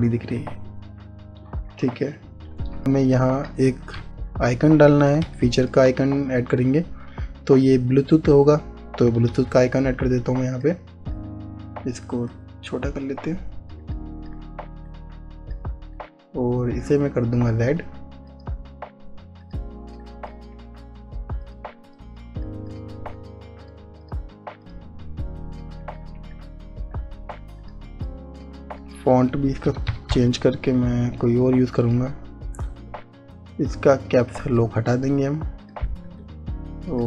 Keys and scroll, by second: 2.8 ctrl+z, 5.0 Left, 6.2 space, 10.3 ctrl+v, 28.4 ctrl+z, 30.7 p, 31.2 p.